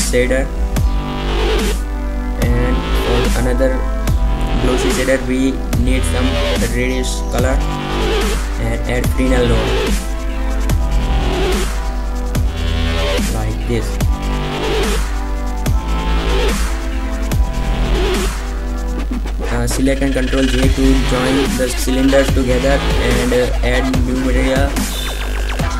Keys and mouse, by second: 7.1 shift+a, 8.3 d, 8.6 BackSpace, 13.2-14.6 drag, 18.6 click, 18.9 b, 21.9 ctrl+j, 22.7 Delete, 22.7 click, 23.4 shift+a.